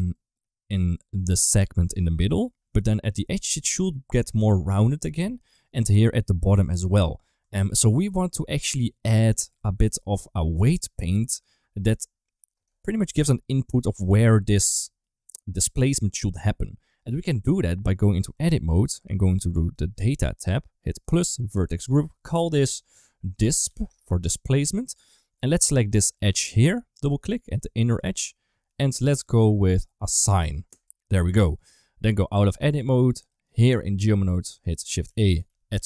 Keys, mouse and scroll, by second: 0.0 middle click, 1.0-2.5 d, 1.1-2.3 drag, 3.0 d, 3.5 d, 5.0 ctrl+z, 5.8 d, 6.0 click, 6.8 ctrl+z, 7.2 Tab, 7.7 shift+middle click, 8.2 middle click, 9.3 Tab, 9.7 shift+middle click, 14.7 middle click, 15.5 middle click, 18.2 Tab, 20.9 click, 21.5 click, 21.7-23.7 drag, 25.7 click, 25.9 click, 26.0 2, 26.1 click, 26.3 click, 26.4 click, 27.9 shift+click, 30.5 click, 31.4 Tab, 32.5 middle click, 33.0 click, 34.3 shift+a.